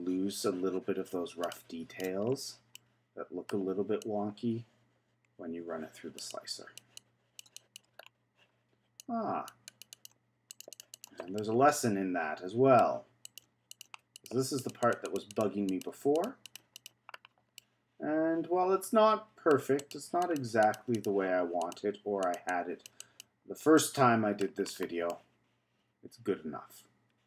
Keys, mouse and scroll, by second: 2.2-2.7 scroll down 2, 2.7-4.0 middle drag, 4.0-8.0 drag, 8.0-9.0 scroll down 2, 9.0-10.6 drag, 10.7 click, 10.9 click, 11.4-13.2 middle drag, 13.2 click, 13.7-16.2 drag, 16.4 click, 17.2-17.6 scroll down 2, 17.6-19.8 middle drag, 19.8 click, 20.2 click, 20.6 click, 21.6 click, 22.2 click, 22.4-23.7 drag, 23.7 middle click, 24.6-25.1 scroll down 4, 25.1-27.2 middle drag.